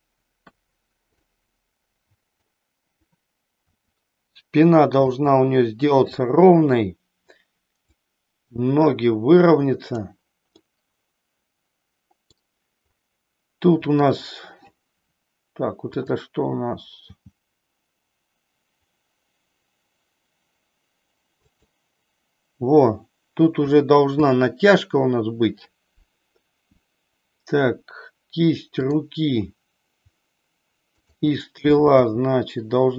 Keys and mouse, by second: 0.3 KP_3, 1.1-2.3 middle drag, 3.6 r, 5.1 click, 7.8-10.0 drag, 10.5-12.3 middle drag, 13.8 click, 17.0 g, 21.5 click, 28.7 click, 31.0 shift+click, 32.0 g.